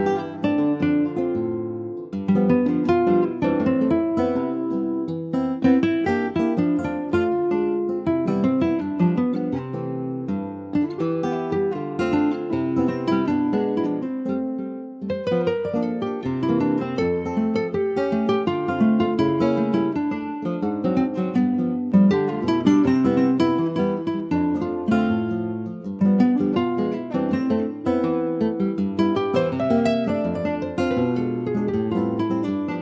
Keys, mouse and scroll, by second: 0.7-2.8 drag, 2.8 middle click, 3.1-3.7 scroll up 1, 3.7 shift+middle click, 3.9 scroll up 1, 4.4 middle click, 4.7 scroll up 1, 4.9-6.6 shift+middle drag, 6.6-9.6 drag, 10.4 Tab, 10.6 click, 10.9-11.8 scroll down 4, 11.2 middle click, 11.8 shift+middle click, 12.2 scroll down 2, 12.4 middle click, 13.0 ctrl+click, 13.4-14.9 shift+middle drag, 14.9 scroll up 1, 15.0-15.4 scroll down 3, 15.4 middle click, 15.9 ctrl+s, 16.1 click, 16.4 shift+middle click, 16.6-16.9 scroll up 2, 16.9 middle click, 17.6 scroll down 3, 17.7 shift+middle click, 18.4 click, 18.8-20.9 middle drag, 20.9 ctrl+s, 21.4 scroll up 2, 21.8 ctrl+s, 22.1 middle click, 22.5 click, 23.2 shift+middle click, 23.4-23.9 scroll up 1, 23.9 ctrl+s, 24.0 click, 24.3-24.7 scroll up 1, 24.7-25.8 middle drag, 25.8 alt+z, 26.4 alt+middle click, 27.1 alt+z, 28.2 ctrl+s, 28.7 shift+a, 30.3-31.2 scroll down 4, 31.4 ctrl+z.